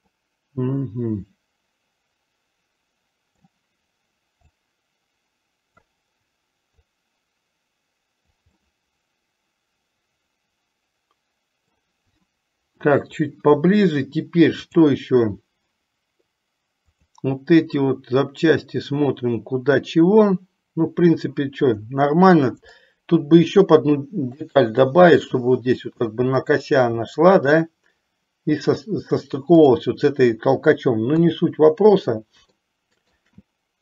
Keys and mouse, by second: 0.4-3.6 middle drag, 4.7 click, 4.9 click, 7.1-8.7 drag, 8.9-11.9 middle drag, 14.9 click, 17.0 click, 22.9-24.8 shift+middle drag, 31.4 KP_3, 32.8-33.5 shift+middle drag.